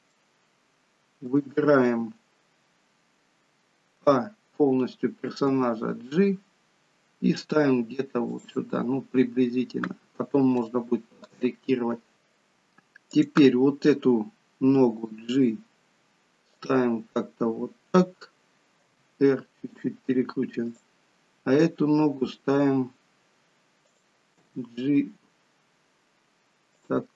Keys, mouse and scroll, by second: 0.2 shift+middle click, 4.1 a, 5.6 g, 9.8-10.6 scroll up 1, 10.8 shift+middle click, 10.8-12.1 scroll up 1, 12.1 middle click, 13.3 click, 14.9 g, 19.0 r, 20.6 click, 21.9 r, 24.4 g.